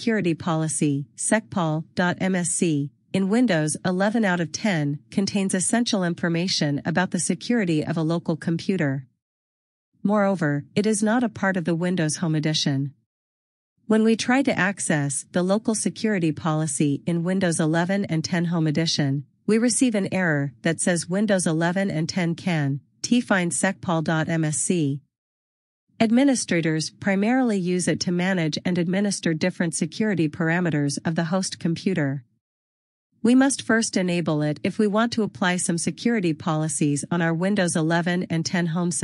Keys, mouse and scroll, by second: 3.8 click, 5.3 click, 9.2 click, 11.3 double click, 15.7 click, 30.3 click, 32.4 click, 33.7 click.